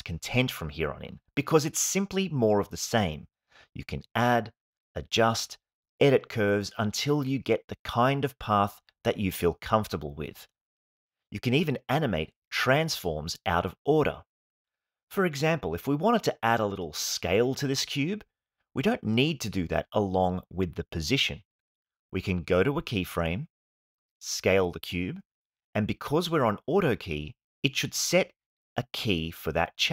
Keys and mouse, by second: 0.1 space, 1.4 space, 1.7-2.1 drag, 2.1 g, 2.2 x, 2.8 space, 4.8 space, 5.7 click, 6.6 g, 7.5 y, 9.9 click, 10.6 g, 10.8 x, 12.0 click, 12.4 space, 16.4 space, 18.9 s, 19.2 z, 20.9 ctrl+click, 23.4 click, 25.2 s, 25.4 z, 27.6 click.